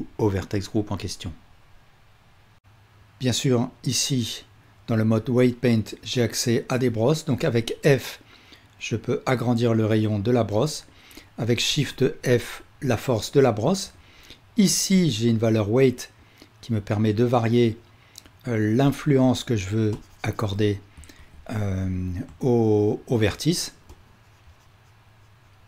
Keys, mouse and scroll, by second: 7.4 f, 11.7 shift+f, 14.9-25.6 ctrl+drag, 21.3 ctrl+z.